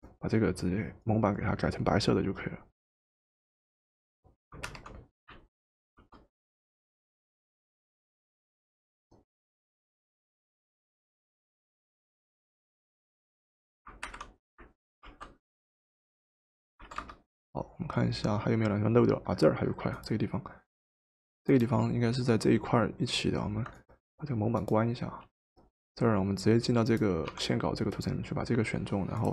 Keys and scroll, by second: 4.7 alt+Delete, 6.0 ctrl+d, 14.1 alt+Delete, 15.0 ctrl+d, 16.8 v, 27.4 w.